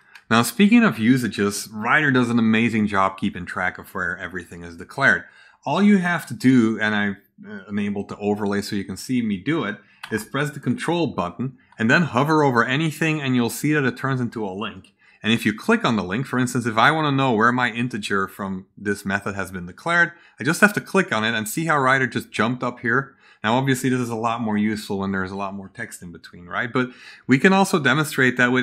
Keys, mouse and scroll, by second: 20.3 ctrl+click.